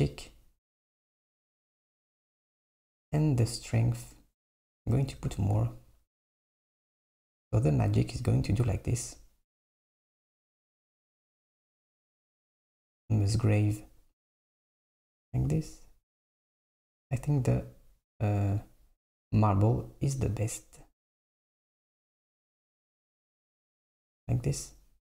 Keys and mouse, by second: 3.1 click, 3.9 click, 4.8 BackSpace, 9.8 click, 11.1-14.2 drag, 16.2-19.3 drag, 20.3-23.4 drag.